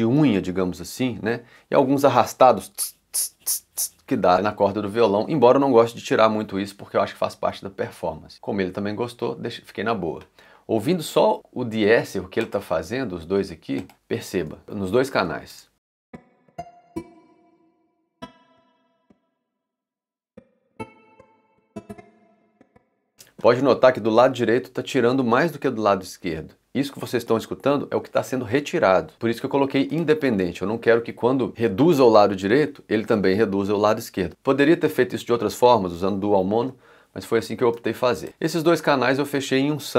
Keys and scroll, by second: 15.5 space, 23.1 space.